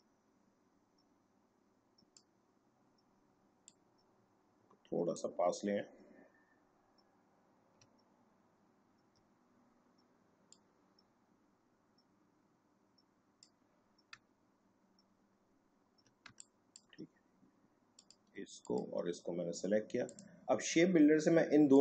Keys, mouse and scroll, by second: 7.8 click, 8.0-9.1 alt+scroll up 1, 10.5-14.3 drag, 14.3 alt+scroll down 1, 16.2 space, 16.4 click, 16.8 space, 18.0 click, 18.6 shift+click, 20.0-21.8 drag.